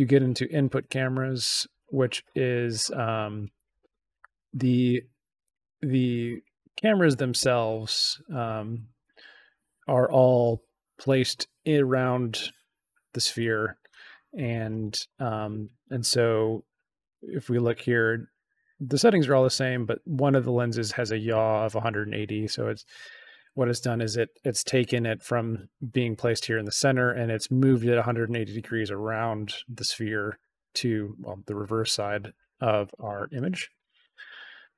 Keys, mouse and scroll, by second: 1.7 click, 2.9 middle click, 5.4 click, 6.3 click, 6.7 click, 7.2 click, 9.0 click, 17.5 click.